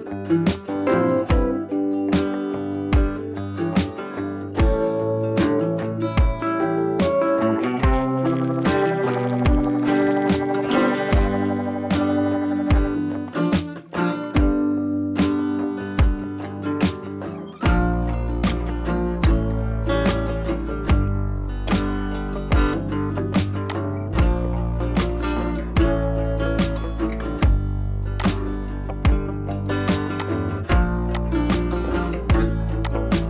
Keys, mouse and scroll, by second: 0.9 click, 3.0 ctrl+z, 3.7 ctrl+z, 4.2 ctrl+z, 5.3-7.1 scroll down 2, 7.6 shift+click, 9.1 ctrl+g, 10.5 ctrl+j, 11.1 right click, 17.0 click, 21.2 right click, 23.7 click, 24.8 scroll down 1, 25.3 ctrl+z, 26.3 ctrl+j, 26.9 right click, 28.1 click, 29.0 scroll down 1, 30.2 click.